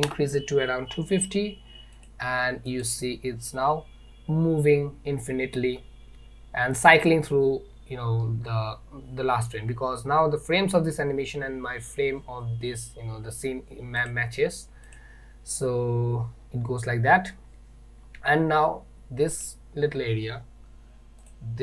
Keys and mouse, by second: 2.0 click, 2.9 click, 14.1 click, 15.0 click, 19.4 click, 21.3 click.